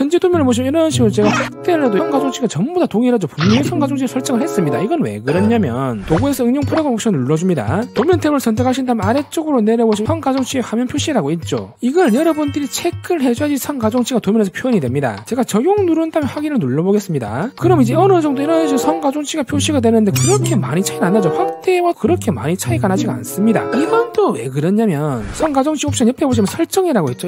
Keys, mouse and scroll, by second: 1.2 click, 2.6 middle click, 3.4 middle click, 5.8 click, 9.7 click, 13.9 click, 16.3 click, 17.4 click, 19.2-20.7 drag, 21.8 click, 23.1 click.